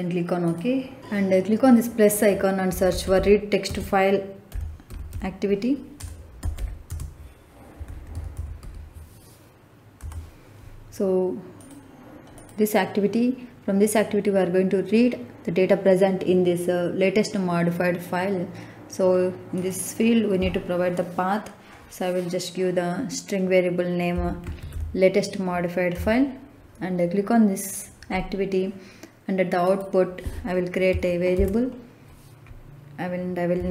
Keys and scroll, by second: 2.6-8.5 typing, 9.9 Return, 24.1 l, 24.4 a, 24.6 t, 25.8 Return, 31.2 ctrl+k, 33.4-33.7 typing.